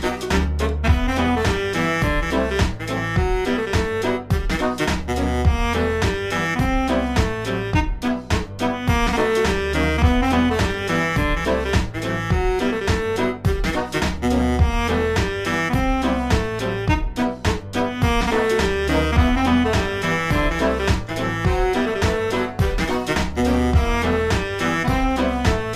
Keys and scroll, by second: 0.0-1.5 typing, 2.5 space, 4.8 space, 5.9 space, 7.1-14.0 typing, 15.9 space, 17.4-20.1 typing, 21.1 space, 21.5 space, 21.8 space, 22.8 space, 24.0 space, 24.5 space.